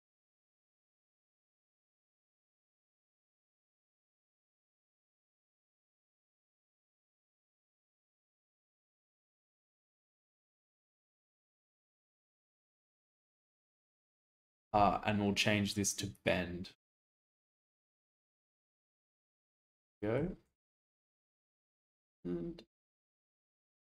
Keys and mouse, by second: 0.7-2.4 drag, 4.4 click, 5.7 click, 6.4-8.8 middle drag, 13.1 click, 16.2 click, 17.9 click, 18.6-20.2 shift+middle drag, 21.8-23.9 shift+drag.